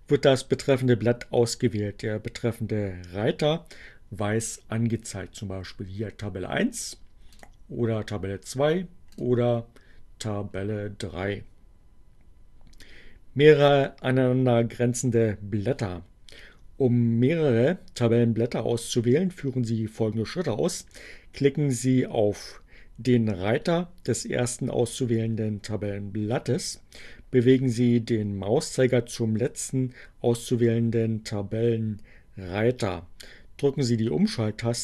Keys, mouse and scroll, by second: 7.2 click, 9.1 click.